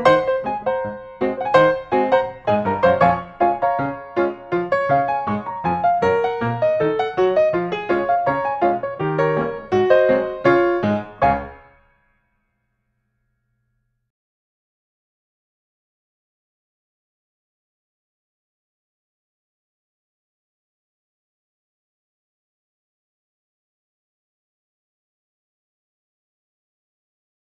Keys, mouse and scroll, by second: 1.5-2.0 scroll, 2.2 click, 2.8 scroll, 3.7 middle click, 3.9-4.7 scroll, 5.4 click, 6.9 right click, 10.8 click, 14.3 click, 15.8-17.1 typing, 18.3 f, 19.9 click, 20.5-21.4 scroll, 22.9-23.7 scroll, 23.2 middle click.